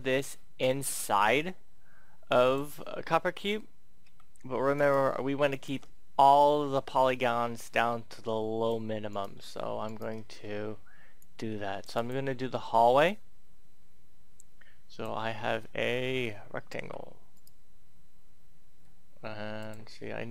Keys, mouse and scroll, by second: 2.9-3.3 scroll up 1, 4.0 scroll up 1, 4.7 right click, 5.5 shift+right click, 6.3-9.1 drag, 9.1 right click, 9.8 shift+right click, 10.3-11.2 scroll down 1, 11.2-15.3 drag, 15.6 middle click, 16.4-16.8 scroll down 1, 17.3 right click, 19.6 click.